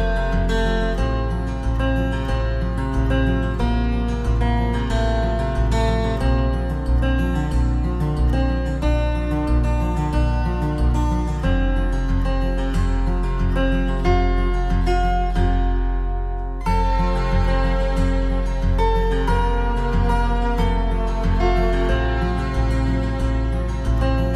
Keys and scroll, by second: 4.8 ctrl+=.